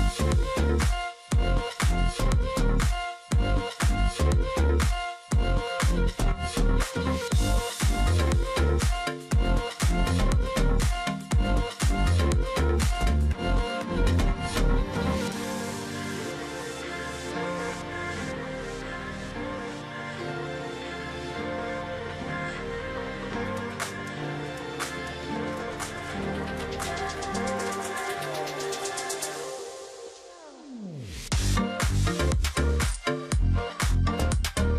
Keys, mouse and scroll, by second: 0.0 ctrl+click, 0.5 alt+click, 3.4 ctrl+click, 4.9 ctrl+click, 5.2 space, 6.6 space, 9.1 ctrl+click, 10.1 ctrl+click, 10.4-11.0 alt+scroll down 1, 11.0 alt+scroll up 1, 11.8 ctrl+click, 12.1 alt+scroll up 1, 12.4 space, 16.0 space, 17.8 ctrl+z, 18.0 space, 19.4 space, 20.2 double click, 20.3 space, 21.5 ctrl+click, 22.8 shift+click, 23.7 alt+click, 24.0 ctrl+click, 24.2-24.6 alt+scroll down 1, 24.6 space, 27.9 ctrl+click, 28.1-28.6 alt+scroll up 1, 28.7 space, 29.0 alt+scroll down 1, 29.2 alt+scroll up 1, 29.5 space, 29.9-30.4 alt+scroll up 1, 30.6 ctrl+click, 32.1 ctrl+click, 32.3 alt+scroll up 1, 33.6 space, 34.3 space.